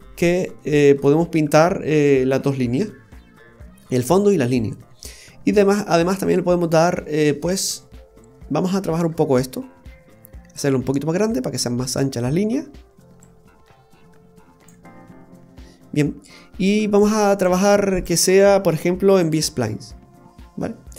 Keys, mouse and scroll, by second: 0.0 scroll down 1, 0.5 middle click, 0.5 scroll down 4, 3.0-4.4 scroll down 5, 4.7 scroll down 2, 5.0 middle click, 6.2-7.6 scroll up 6, 8.1-8.6 scroll up 2, 8.6 middle click, 9.0-9.3 scroll up 1, 10.5 click, 13.2 click, 15.0-15.9 scroll up 2, 17.0 click, 18.0 click, 20.6-20.9 scroll up 1.